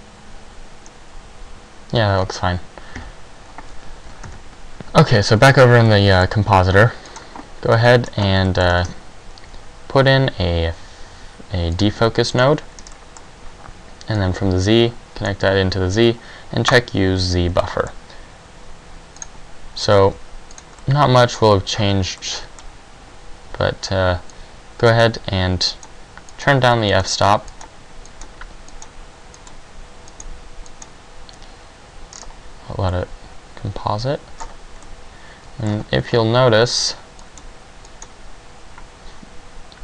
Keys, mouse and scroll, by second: 3.1 Escape, 3.1-3.8 scroll up 2, 4.4 ctrl+Left, 13.7 click, 13.7 middle click, 13.7-14.0 scroll down 2, 13.7 g, 14.4 click, 16.9 click, 18.1 middle click, 25.9 click, 26.5 click, 27.1 click, 27.7 click, 28.3 click, 28.9 click, 29.6 click, 30.3 click, 30.9 click, 32.4 scroll down 4, 38.1 click, 38.1-39.5 scroll up 5.